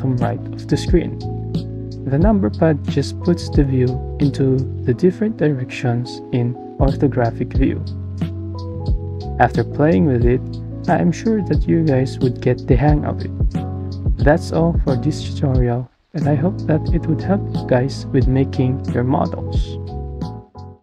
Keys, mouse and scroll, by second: 4.9 click, 6.3 KP_2, 6.8 click, 12.8-13.3 drag, 16.0 KP_1.